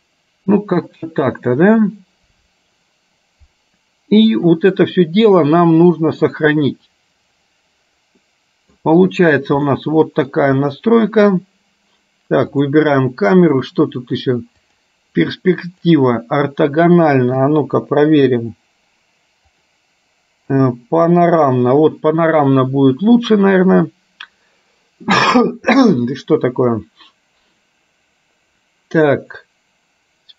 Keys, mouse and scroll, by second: 8.3 middle click, 9.8 middle click, 12.7 click, 14.7-15.9 drag, 17.4 KP_0, 19.5-20.8 drag.